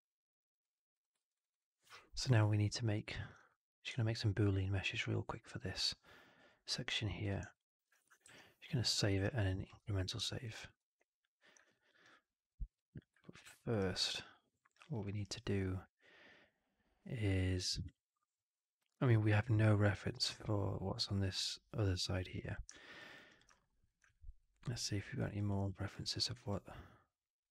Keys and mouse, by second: 0.8 click, 1.1 alt+middle drag, 1.2 alt+right click, 1.4 alt+right click, 1.7 alt+middle drag, 1.9 alt+right drag, 2.2 alt+click, 7.1 click, 7.4 alt+click, 7.6 alt+middle drag, 8.1 ctrl+s, 9.0 ctrl+s, 10.2 alt+middle drag, 10.4 alt+right click, 10.6 alt+right click, 11.6 alt+middle drag, 11.9-12.4 alt+drag, 12.8 click, 13.1 alt+middle drag, 13.4 alt+middle click, 13.7 alt+right drag, 13.9 alt+right drag, 14.6 alt+click, 14.9 alt+middle drag, 15.1 alt+right click.